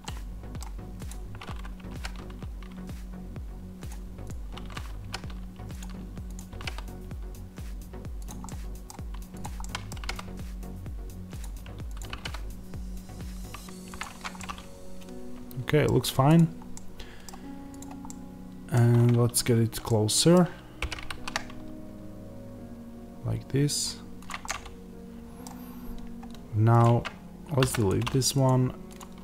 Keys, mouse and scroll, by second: 1.0 click, 1.8 g, 3.8 click, 4.9 g, 5.7 click, 6.4 g, 8.1 click, 8.3 middle click, 9.3 click, 9.5-11.3 middle drag, 9.8 g, 11.3 click, 12.0 g, 13.9 click, 14.0 Tab, 14.3-16.1 middle drag, 15.7-16.1 scroll down 2, 16.1 click, 16.6-24.1 middle drag, 17.7 click, 18.8-19.4 scroll up 2, 19.4-19.7 scroll down 2, 20.7 g, 24.1 click, 24.3-26.7 middle drag, 25.6 scroll, 26.7 click, 27.8 x, 28.3 click.